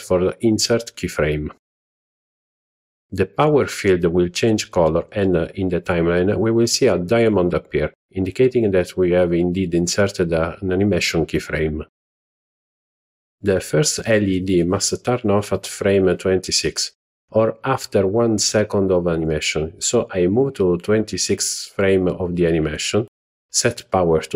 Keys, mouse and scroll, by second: 7.8-8.1 drag, 12.1-13.4 drag, 20.0-22.0 drag, 24.1 click.